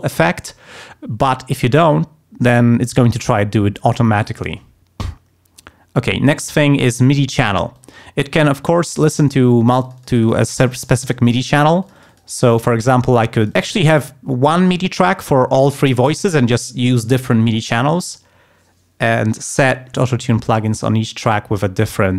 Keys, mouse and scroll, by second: 7.7 click, 8.7 click, 8.8 right click, 9.5-12.3 drag, 12.5 click, 13.4 click, 20.6 click, 21.8 click.